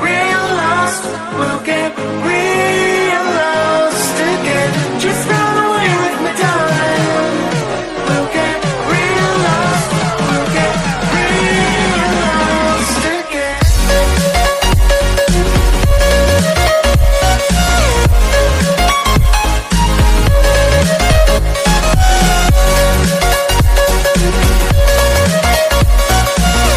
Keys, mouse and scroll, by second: 1.5 click, 2.7-3.1 scroll down 1, 3.1 g, 10.9 click, 11.8 g, 14.8 shift+d, 17.3 shift+d, 20.7 click, 22.3-22.9 scroll down 1, 22.9-23.6 scroll up 4, 23.6 click, 24.2 KP_1, 24.9-25.5 scroll up 5, 25.7 g.